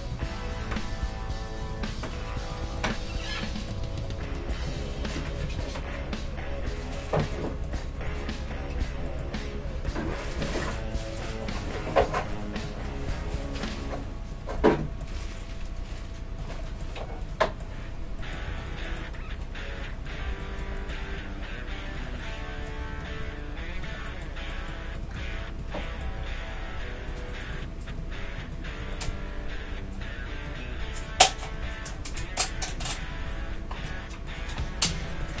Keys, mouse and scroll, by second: 0.1 s, 1.8 s, 2.8-4.2 middle drag, 4.7 ctrl+z, 5.4 ctrl+z, 8.1 KP_3, 9.9-12.4 drag, 10.1 Tab, 13.2 g, 14.7 middle click, 15.1 g, 17.2-18.7 right drag, 18.5 Tab, 18.7-20.4 drag, 18.7-21.3 middle drag, 19.4 s, 21.1 s, 22.8 g, 25.0-27.2 right drag, 25.2 Tab, 26.2 g, 27.7-28.9 right drag, 28.9-30.9 middle drag, 29.1 g, 30.9-35.4 right drag, 33.3 g, 34.5 g.